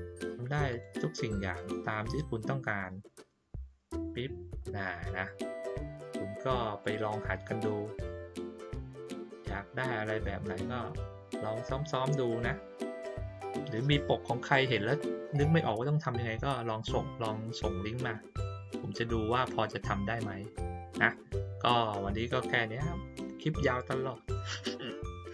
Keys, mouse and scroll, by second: 0.7 click, 3.9 click, 4.9 middle click, 6.8 click.